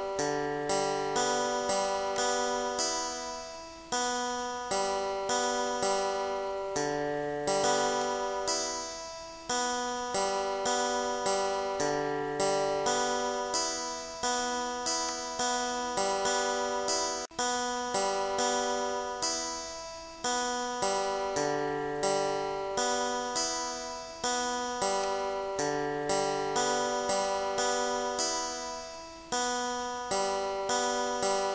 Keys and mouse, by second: 2.2 click, 8.0 click, 15.1 click, 19.4 click, 20.6 click, 24.1 click, 25.1 click, 27.6 click, 30.3 click.